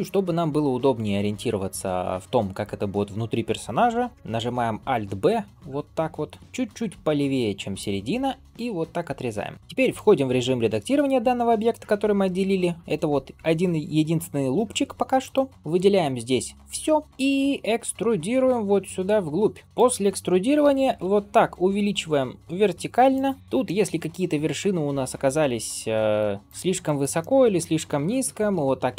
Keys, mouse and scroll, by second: 4.4 alt+b, 9.5 shift+middle click, 9.5 scroll up 2, 11.3 g, 15.5 Tab, 15.5 a, 15.9-17.0 middle drag, 17.0 ctrl+KP_3, 17.7 e, 23.4 click, 23.4 scroll up 2, 23.5-26.0 middle drag, 26.4 click, 26.7 shift+middle click, 27.1 middle click, 28.1 g.